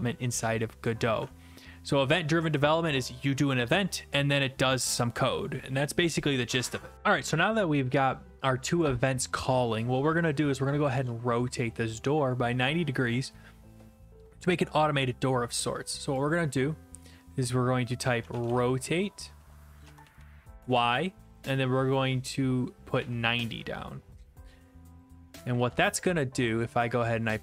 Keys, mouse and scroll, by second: 1.1 alt+F4, 17.5 click, 18.0-19.8 typing, 20.6 Return, 22.7-24.0 typing, 25.0 click, 26.0 ctrl+s, 26.9 click.